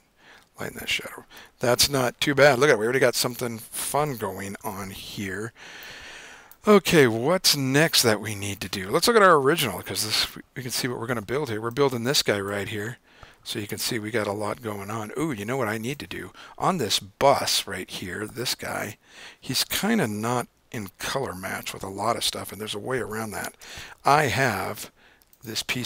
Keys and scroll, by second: 1.7 super+-, 4.7 super+r, 20.6 super+=, 21.4 super+-, 23.6 super+o.